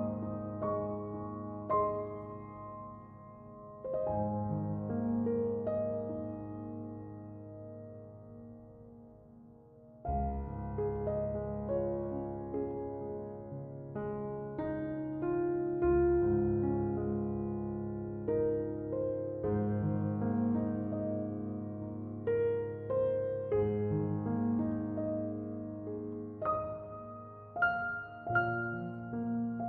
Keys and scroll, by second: 1.8-5.5 typing, 6.9 Return.